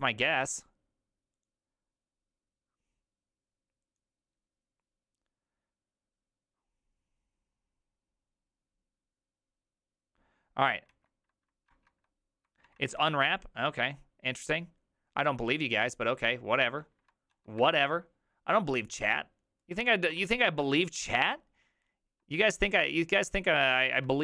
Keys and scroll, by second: 19.7 alt+{, 19.7 Escape, 20.2 alt+[, 23.9 alt+{.